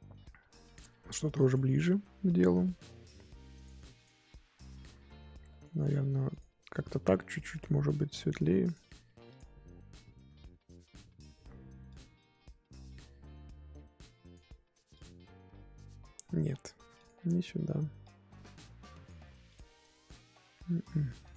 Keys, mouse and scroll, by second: 4.0-5.5 drag, 5.5-6.6 middle drag, 6.6 click, 8.3 click, 9.4 click, 9.6 scroll down 4, 9.9-12.8 middle drag, 12.8 click, 15.0 click, 15.3-17.1 scroll up 2, 17.1 click, 19.6-21.3 drag.